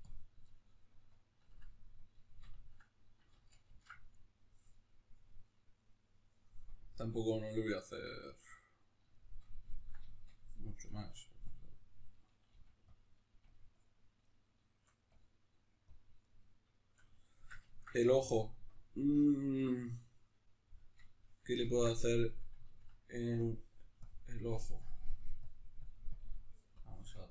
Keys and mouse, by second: 0.5-11.5 middle drag, 3.4 ctrl+z, 11.5-12.9 drag, 12.5 f, 13.3 f, 13.7 click, 14.3 middle click, 15.1-16.3 drag, 16.3-23.5 middle drag, 23.5-27.3 drag.